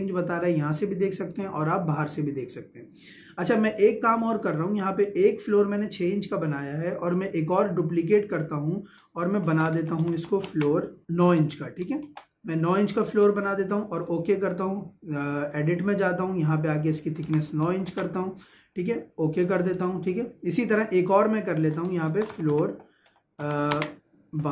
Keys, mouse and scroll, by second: 1.3 click, 7.1 click, 9.8 l, 10.5 space, 11.9 shift+space, 14.0 click, 19.4 click, 22.3 l, 23.7 space.